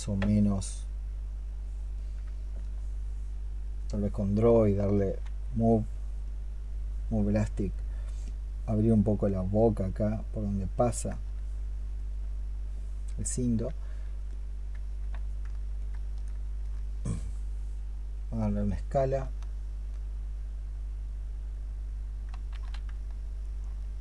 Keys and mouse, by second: 4.9 x, 16.5 alt+click, 19.1 alt+click, 22.3 ctrl+z, 23.4-24.0 alt+drag.